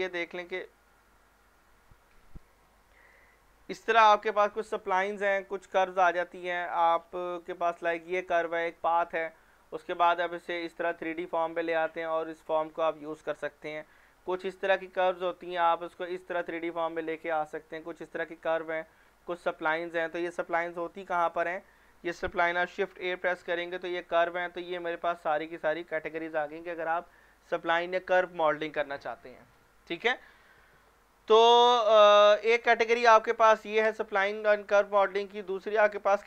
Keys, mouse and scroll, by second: 4.8-5.2 scroll up 1, 5.2 scroll down 1, 6.2 scroll up 1, 6.7 scroll down 1, 7.5 scroll up 1, 7.5-9.2 scroll, 9.9 scroll down 1, 11.2 scroll down 1, 11.8 scroll down 1, 12.4 scroll down 1, 14.3 scroll down 1, 18.4 scroll down 1, 19.2 scroll down 1, 21.0 click, 22.9 shift+a, 24.2 click, 32.3 click.